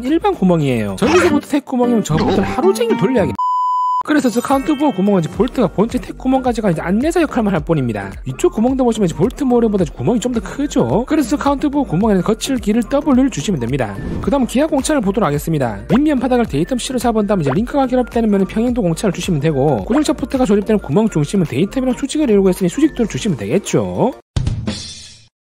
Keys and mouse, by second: 1.8-3.3 drag.